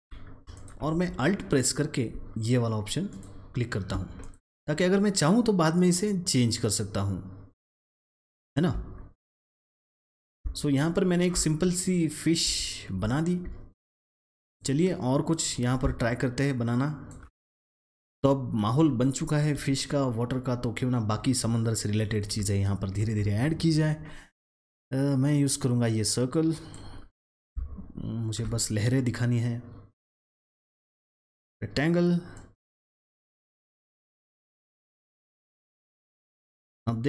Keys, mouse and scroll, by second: 6.5 double click, 7.5 click, 7.7 double click, 8.3-9.5 alt+scroll down 1, 9.5 click, 10.4-11.5 alt+scroll down 2, 11.2 alt+click, 11.8-13.3 alt+scroll up 2, 13.4-14.4 alt+scroll down 1, 14.4-16.4 drag, 16.4-17.9 alt+shift+drag, 18.8 space, 18.9 click, 19.5 space, 22.3 space, 22.5 click, 22.8 space, 25.0-27.3 drag, 27.3 click, 30.2-33.9 drag, 34.4-35.4 alt+scroll up 1, 35.4-37.0 drag.